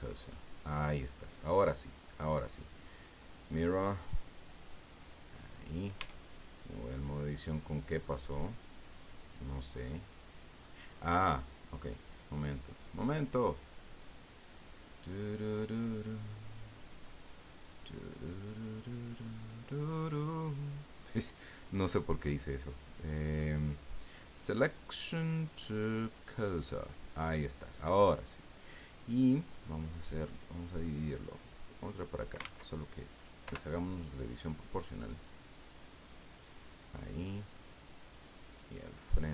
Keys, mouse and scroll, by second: 0.4-1.3 middle drag, 2.2 click, 5.4 click, 6.0 Tab, 7.4-7.7 scroll down 2, 8.0-10.7 middle drag, 12.6 click, 26.1 click, 31.1-32.1 drag, 32.4 ctrl+z, 33.4 o, 35.5-36.8 drag, 37.0 middle click, 38.4-39.3 drag.